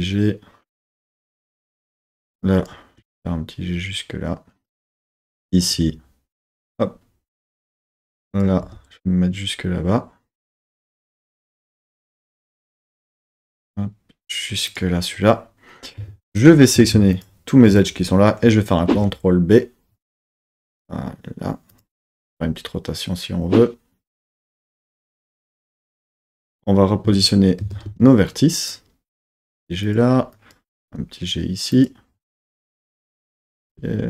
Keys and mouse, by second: 1.8 click, 2.5 click, 3.0 g, 4.6 click, 5.2 click, 5.8 g, 7.6 click, 8.3 click, 8.6 g, 10.4 click, 11.4 g, 14.7 click, 16.0 2, 16.4 click, 17.2 alt+click, 18.9 super+b, 21.7 click, 22.2 r, 25.9 click, 27.0 Tab, 27.6 Tab, 27.9 1, 28.6 click, 29.2 g, 29.9 click, 30.7 g, 31.8 click, 33.2 click, 33.6 g.